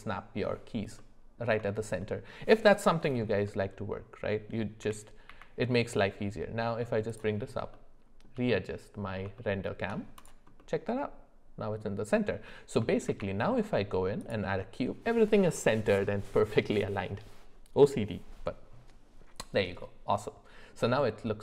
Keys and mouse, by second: 1.0 middle click, 1.7 shift+middle click, 3.5 middle click, 4.8 g, 7.7 shift+middle click, 8.5 middle click, 9.4 shift+middle click, 10.2 click, 10.6-11.8 middle drag, 13.0 shift+a, 19.8 middle click.